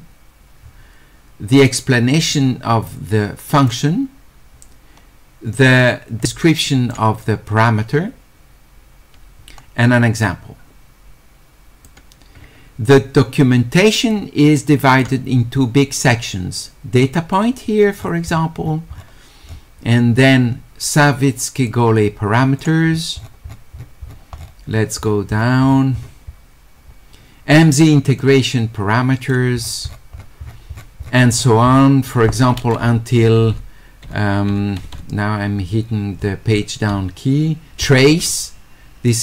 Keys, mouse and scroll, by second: 1.7-3.7 drag, 5.8-6.9 drag, 10.2-11.8 drag, 14.1 click, 16.1-17.4 drag, 21.7 click, 23.0 middle click, 23.5 middle click, 24.0 middle click, 26.4 middle click, 28.2-29.3 drag, 29.7 middle click, 30.5 middle click, 30.5-32.0 scroll down 5, 31.4 middle click, 31.7 middle click, 39.1 click.